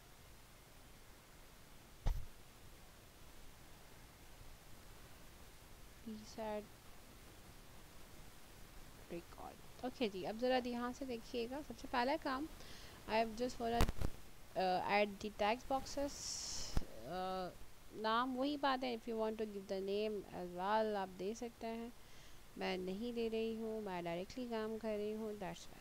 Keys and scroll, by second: 7.7-10.8 typing, 19.1 ctrl+c, 20.4 ctrl+v, 22.0 ctrl+v, 23.7 ctrl+v, 25.4 ctrl+v.